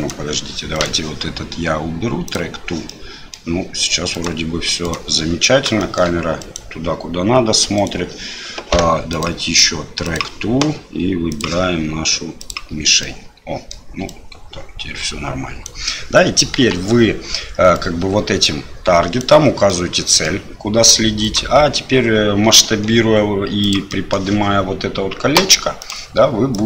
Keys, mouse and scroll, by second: 0.0 right click, 0.7 right click, 2.3 click, 3.0 middle click, 4.1 right click, 4.8 right click, 5.9 shift+middle click, 6.4 right click, 7.8 right click, 9.2-10.1 drag, 11.3 click, 13.1-13.8 middle drag, 14.1-15.7 right drag, 16.6 KP_1, 17.7-19.2 right drag, 19.8-20.3 middle drag, 21.2 right click, 24.0 middle click, 25.9 click, 26.5-26.6 drag.